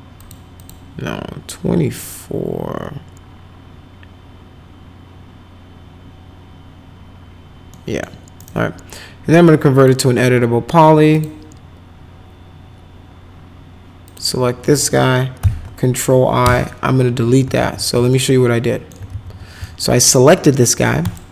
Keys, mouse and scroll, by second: 0.2 click, 0.5 click, 7.7 middle click, 8.4 right click, 9.7 click, 11.1 click, 14.0 click, 15.4 ctrl+i, 16.4 Delete, 17.6 ctrl+z, 18.1 alt+middle click, 19.1 ctrl+z, 19.6 alt+right click, 20.0 click, 21.0 click.